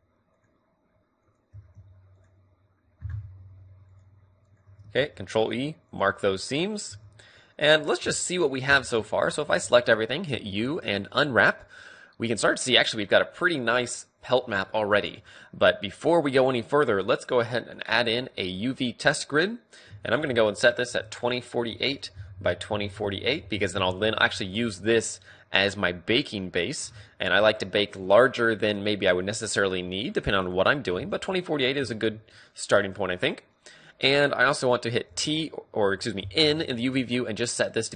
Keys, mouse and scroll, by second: 5.0 ctrl+e, 6.2-10.7 middle drag, 6.9 a, 9.4 a, 10.3 u, 10.8 click, 31.0-34.3 middle drag.